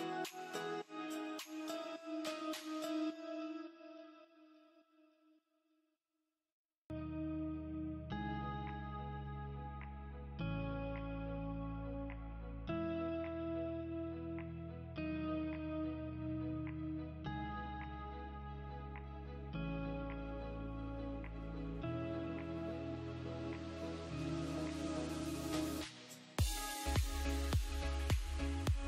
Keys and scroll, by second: 0.3 F2, 1.4 Escape, 4.7 space, 8.7 space, 13.9 space, 16.9 space, 19.4 space.